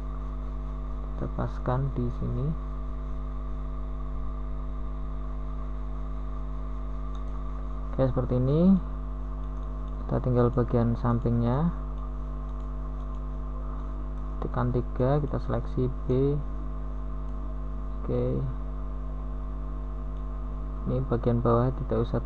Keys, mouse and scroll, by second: 0.9 z, 5.3 b, 6.6 b, 9.8 u, 13.2 g, 18.5-20.2 middle drag.